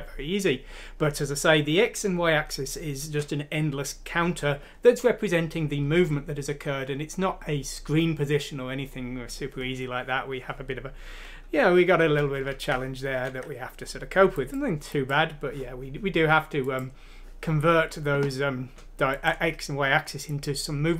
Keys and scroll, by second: 13.3 alt+Tab.